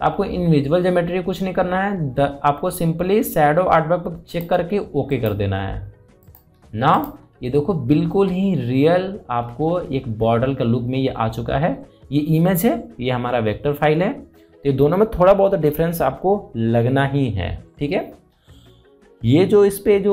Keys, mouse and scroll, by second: 5.0 click, 8.0-8.8 scroll down 1, 10.5 scroll up 1, 11.8-13.0 scroll down 1, 15.4-15.7 scroll up 1.